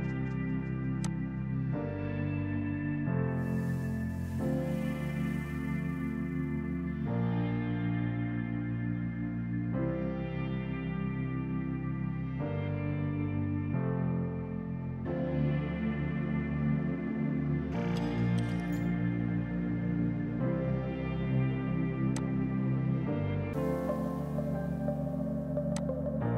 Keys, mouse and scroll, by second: 1.1 alt+click, 3.0 Delete, 14.5 Delete, 19.0 space, 22.2 click, 25.8 click.